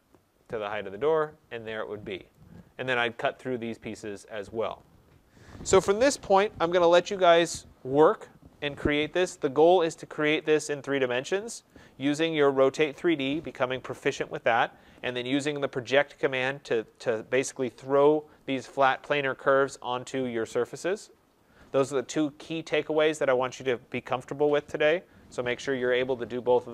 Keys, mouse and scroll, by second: 0.5 click, 1.1-2.2 scroll, 2.2 right click, 2.2 scroll, 11.6 right click, 15.3 right click, 15.6-16.6 scroll, 18.4 click, 19.3 click.